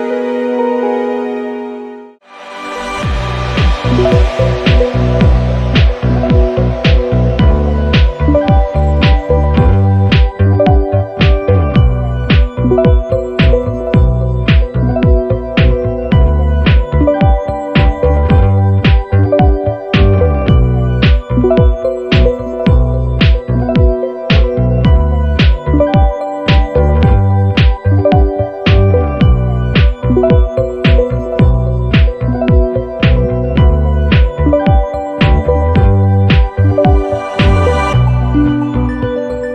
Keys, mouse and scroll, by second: 2.3 click, 3.0 click, 4.1 click, 5.2 click, 5.8 click, 6.3 click, 6.9 click, 8.8 click, 14.9 ctrl+d, 16.3 click, 17.1 click, 19.6 click, 20.5 click, 22.0 click, 22.9-23.3 ctrl+scroll up 2, 24.4 click, 24.9 click, 25.3 click, 26.5 click, 27.6 ctrl+d, 28.9 click, 30.0-30.5 ctrl+scroll down 4, 31.6 click, 32.8 click, 33.3 click, 34.4 click, 35.0 middle click, 35.1 click, 35.2 middle click, 35.3 click, 35.3 middle click, 35.5 click, 36.3 click, 37.6-39.5 ctrl+shift+drag.